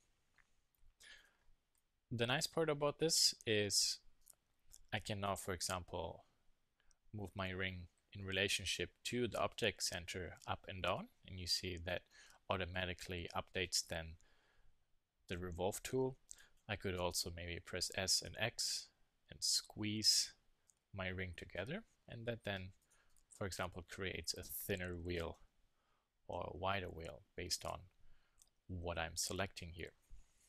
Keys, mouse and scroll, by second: 5.8 g, 13.1-15.5 middle drag, 17.9 s, 22.9 click, 25.3 s, 28.7 z.